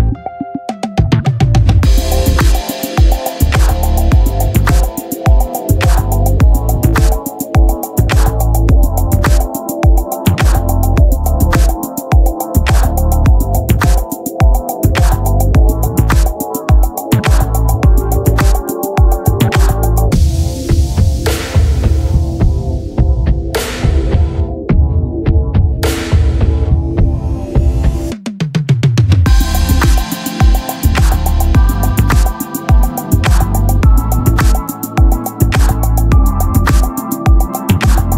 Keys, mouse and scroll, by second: 0.7-2.0 drag, 2.0-4.0 middle drag, 4.7 ctrl+j, 6.9-9.1 drag, 9.3-10.8 middle drag, 10.4-12.1 right drag, 11.3-12.6 drag, 11.4-12.6 middle drag, 14.1 middle click, 14.9-16.1 drag, 16.1 r, 18.1-19.2 drag, 19.2-21.0 middle drag, 21.2 middle click, 21.6-23.3 right drag, 22.2 r, 25.1-26.4 drag, 26.4-27.7 middle drag.